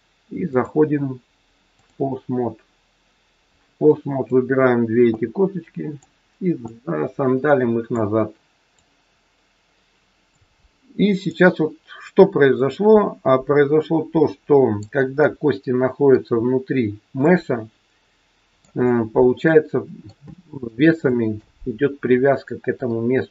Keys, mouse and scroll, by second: 0.5 click, 3.7 click, 5.1 click, 8.7 click, 11.2 click, 15.2 middle click, 16.4-17.1 scroll up 3, 17.1 middle click, 18.8-19.4 scroll down 5, 19.4 middle click, 20.2 shift+middle click, 20.8 middle click, 22.8 middle click.